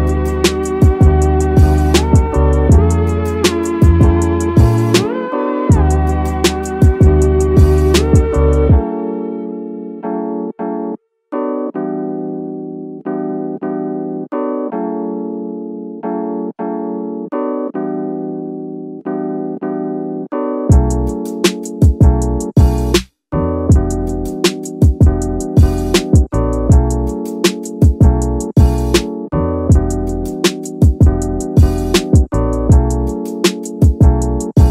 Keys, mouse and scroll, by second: 0.2 scroll down 2, 0.5 scroll up 1, 0.6 middle click, 1.2-2.0 middle drag, 2.3-2.6 scroll up 1, 2.6 middle click, 3.7 middle click, 6.5 ctrl+alt+KP_0, 8.1 click, 9.1 g, 11.2 click, 13.0 click, 13.7-16.7 drag, 18.0 g, 18.3 middle click, 21.0 click, 22.0 g, 23.4 click, 25.3-28.7 drag, 27.1 KP_0, 29.2-31.3 drag, 30.2 KP_0, 30.3 KP_0.